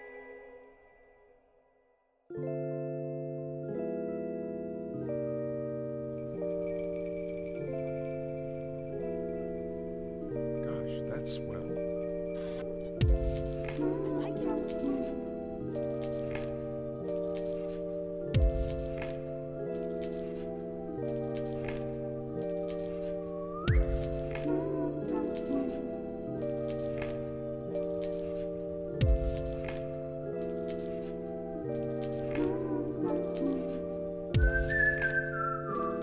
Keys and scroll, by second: 0.4 ctrl+c, 3.4 ctrl+c, 3.6 ctrl+v, 4.2 z, 5.3 alt+x, 6.9 alt+x, 10.1 ctrl+c, 10.3 ctrl+v, 10.9 z, 11.3 alt+x, 16.6 1, 17.9 5, 18.1 Return, 19.8 ctrl+s, 21.2 ctrl+c, 23.1 ctrl+v, 23.9 ctrl+c, 24.1 alt+z, 24.6 ctrl+v, 25.3 ctrl+s, 34.1 x, 35.9 ctrl+c.